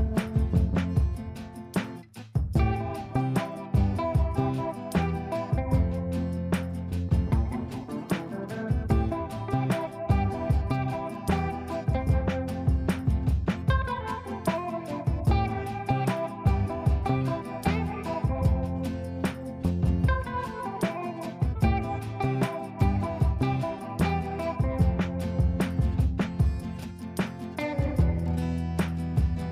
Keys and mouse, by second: 0.8 click, 1.1 F3, 1.5 F2, 2.1-3.1 click, 2.9 click, 5.6-6.9 drag, 13.2 click, 15.4 right click, 17.2-17.8 drag, 21.7-22.6 ctrl+click, 22.7-24.2 ctrl+space, 24.1 F2, 24.3-26.9 drag, 25.5-25.8 click, 27.8 right click, 28.2 click.